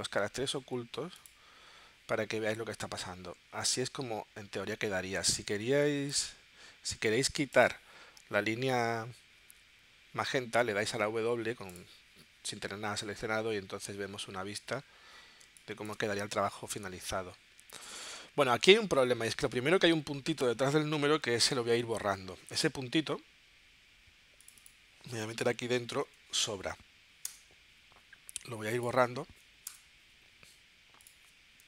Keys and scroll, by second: 13.2 w, 15.5 space, 22.4 w, 27.3 BackSpace, 29.7 BackSpace.